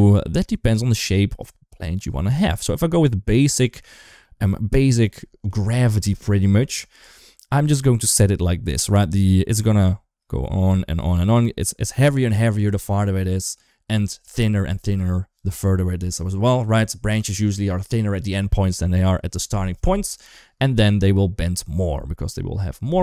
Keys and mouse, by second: 0.3 click, 0.9 click, 1.7 click, 2.3 click, 2.9 click, 4.0 shift+middle drag.